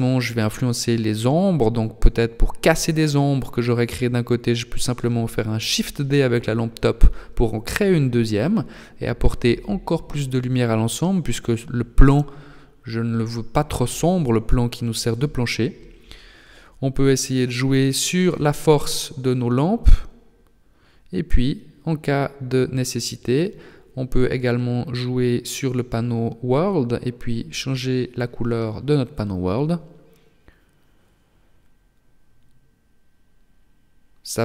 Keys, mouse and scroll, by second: 1.5 r, 2.9 g, 11.9 click, 11.9 r, 11.9 g, 13.3 click, 20.0 h, 21.2 click, 22.4 click, 22.4 right click, 23.8 click, 27.4 right click, 32.6 click.